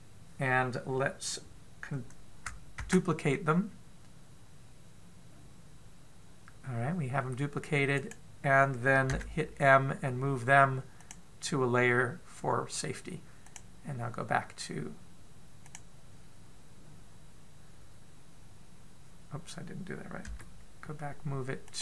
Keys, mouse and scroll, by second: 6.6 shift+d, 9.9 m, 18.0 click, 21.0 m.